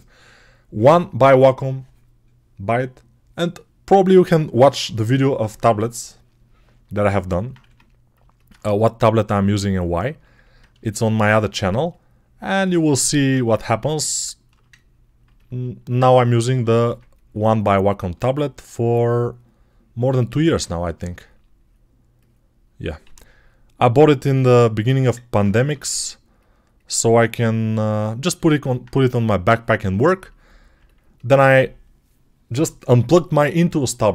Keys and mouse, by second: 7.5 1, 8.3-11.6 ctrl+drag, 11.6-15.1 alt+right drag, 15.1-34.1 ctrl+alt+drag, 16.5 1, 22.9 g, 25.5 3.